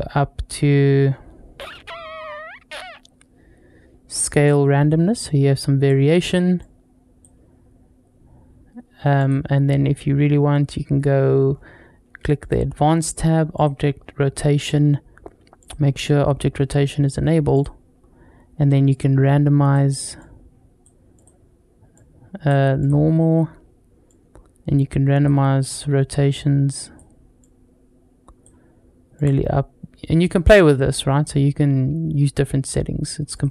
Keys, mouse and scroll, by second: 0.9-2.7 scroll up 3, 2.7-4.0 scroll down 1, 4.0-5.7 drag, 6.4-9.1 drag, 9.4-11.0 scroll down 2, 11.3 scroll up 2, 12.2 click, 13.4 click, 13.8-14.5 scroll down 1, 15.4 click, 17.4 click, 18.7 click, 20.0 click, 21.0-22.7 drag, 23.9-25.1 drag, 25.5-26.8 drag, 27.2-28.3 drag, 29.0-33.3 drag.